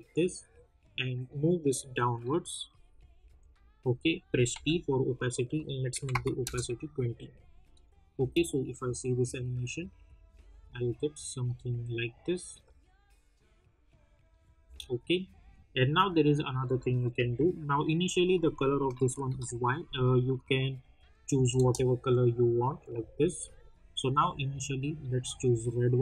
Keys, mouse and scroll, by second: 0.1-2.8 drag, 2.8 Down, 4.5 t, 5.5 click, 6.4 Return, 7.8 click, 8.1 space, 14.6 space, 15.5 click, 17.1 u, 18.3 click, 19.2 ctrl+y, 20.2 click, 21.3 Return, 22.6 click.